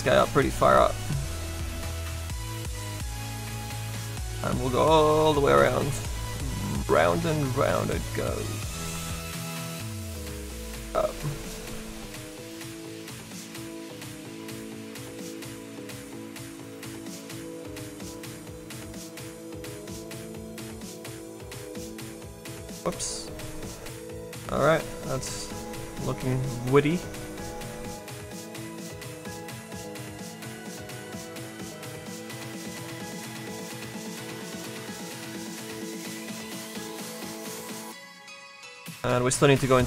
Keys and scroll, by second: 22.5 z.